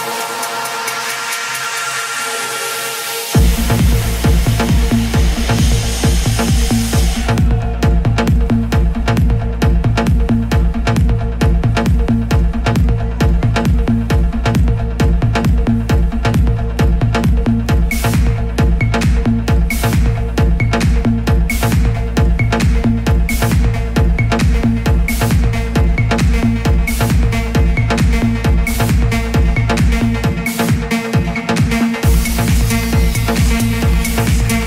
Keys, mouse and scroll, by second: 25.5 space, 27.8 click, 28.9 KP_0, 32.6 click.